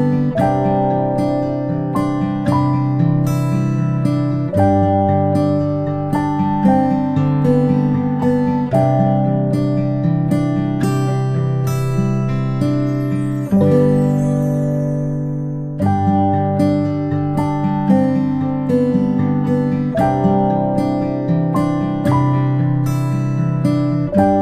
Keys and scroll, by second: 14.2 ctrl+z, 24.1 ctrl+z.